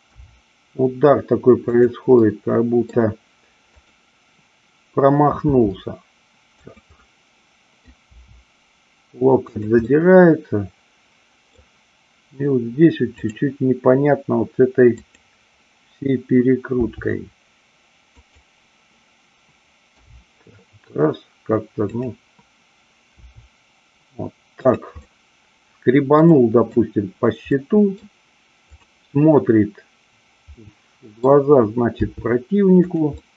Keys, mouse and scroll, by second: 0.1 r, 1.7 click, 2.1 middle click, 3.7-4.9 drag, 5.4 r, 6.7 click, 6.9-7.8 middle drag, 9.4 click, 9.9-11.5 middle drag, 13.1-14.5 drag, 14.9-16.1 drag, 16.8 r, 18.1 click, 20.0 g, 22.0 click, 23.1 r, 25.0-26.0 middle drag, 26.3-26.8 middle drag, 27.5 middle click, 28.8-30.0 drag, 30.5-31.1 middle drag, 32.0 r, 32.9 click, 33.1-33.3 middle drag.